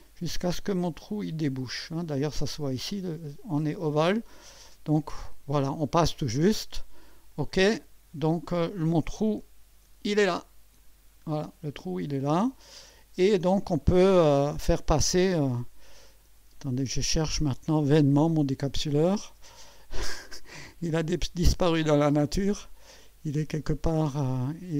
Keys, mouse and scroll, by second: 0.5 scroll up 2, 1.7 click, 4.7-6.3 drag, 7.3 click, 10.3-13.7 drag, 14.2 scroll down 2, 15.2 click, 15.6 space, 16.8 scroll down 2, 22.6 click, 23.3-23.6 scroll down 1.